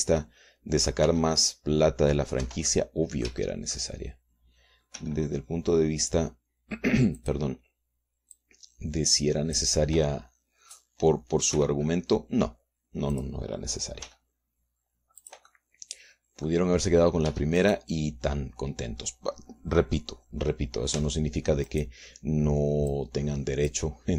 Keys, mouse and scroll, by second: 1.4 middle click, 2.2 g, 3.6 Escape, 3.8 click, 4.2 middle click, 4.4 shift+click, 5.0-8.1 shift+middle drag, 6.1 g, 8.3 click, 9.5-10.9 drag, 12.7 r, 14.3 click, 15.2 g, 16.4-17.8 drag, 18.4 Tab, 18.8 right click, 22.1 Tab, 22.8 right click, 24.0-24.1 drag.